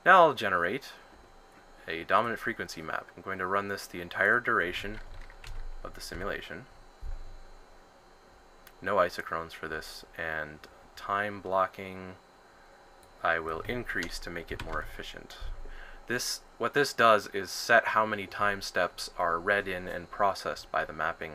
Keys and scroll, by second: 6.1 1, 14.2-15.2 typing.